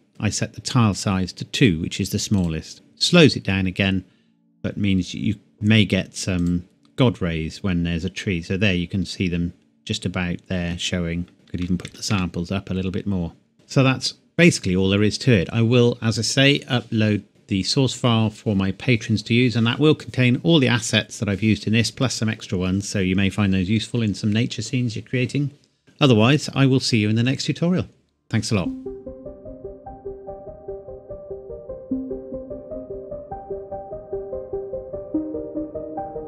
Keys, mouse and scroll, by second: 1.6 click, 6.4 click, 11.3 click, 11.5 KP_5, 11.6 KP_1, 11.9 KP_2, 12.1 KP_Enter.